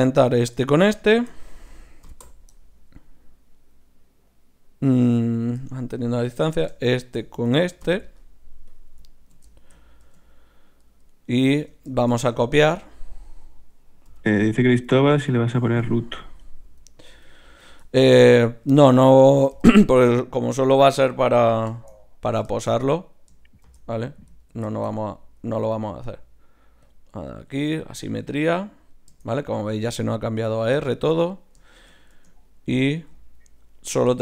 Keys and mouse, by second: 2.0 ctrl+p, 5.7 middle click, 6.4-8.6 right drag, 7.8 ctrl+p, 10.0 Tab, 11.6 Tab, 12.4 z, 13.2 click, 14.1-17.5 typing, 19.6 l, 20.0 l, 20.6 l, 21.3 z, 23.6 shift+c, 25.6 w, 26.9 click, 29.4-32.8 right drag, 31.7-33.2 drag, 32.1 Tab, 33.8-34.2 drag, 33.8-34.2 right drag.